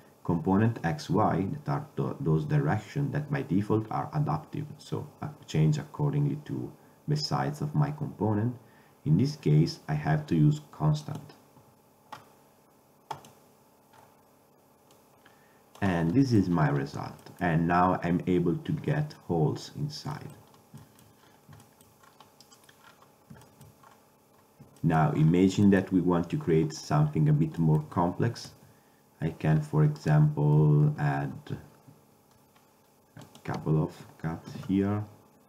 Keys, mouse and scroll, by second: 14.1 click, 15.0-16.3 drag, 16.3-16.8 middle drag, 18.9 middle drag, 20.2 middle drag, 20.6-21.7 middle drag, 28.6 Tab, 31.0 ctrl+r, 34.6 ctrl+r.